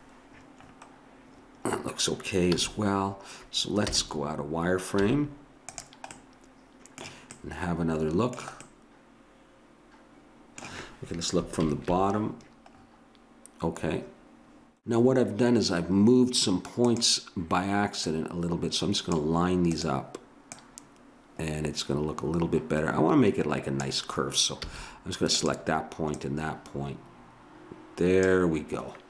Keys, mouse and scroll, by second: 2.5 a, 3.9 z, 5.0 z, 11.6 ctrl+KP_1, 16.8-19.7 drag, 20.5-22.3 drag, 24.7 a, 25.3-27.7 drag.